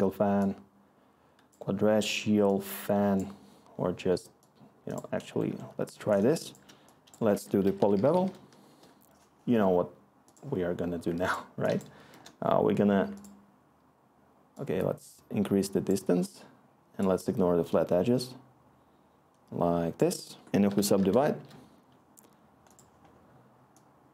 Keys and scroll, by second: 7.3 Tab, 7.4-8.6 typing, 12.0 Return, 20.3-21.4 typing, 21.5 Tab, 21.5 Delete.